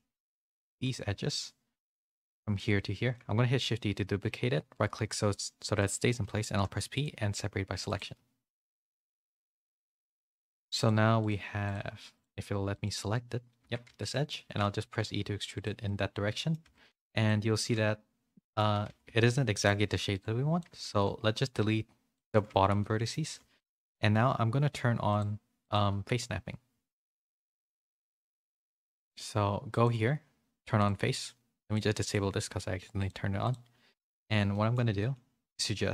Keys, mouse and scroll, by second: 0.2 2, 1.0 z, 1.9 z, 2.5 middle click, 3.3 shift+d, 7.2 Tab, 7.8 click, 8.4 click, 9.1-10.2 drag, 10.8 click, 11.6-12.8 drag, 13.6 Tab, 13.8 a, 14.0 middle click, 14.4 e, 15.8 middle click, 16.6 a, 16.9 z, 17.2-18.5 middle drag, 18.6-20.8 typing, 19.1 middle click, 22.4 z, 22.7 middle click, 23.2 2, 23.5 click, 23.9 middle click, 25.0 click, 25.6-27.3 drag, 27.4-29.1 drag, 29.7-31.7 drag, 32.0 click, 32.9 click, 33.4 click, 34.4 middle click, 34.9 shift+middle click, 35.5 middle click.